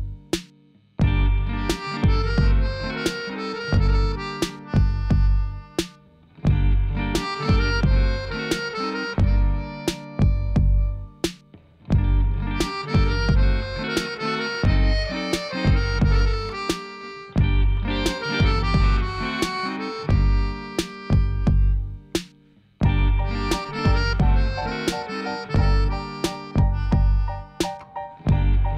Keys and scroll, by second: 0.5 o, 0.7 p, 6.9 Tab, 15.0 ., 15.2 0, 15.6 Return, 18.9 Tab, 19.1 a, 19.8 Tab, 20.6 alt+a, 25.9 alt+a.